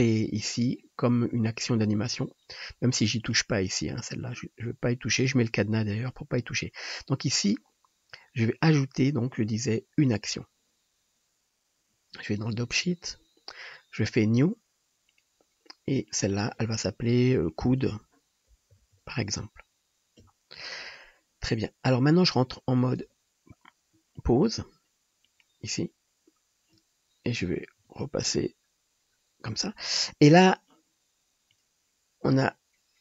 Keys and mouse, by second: 5.4-7.0 drag, 23.1 ctrl+Tab.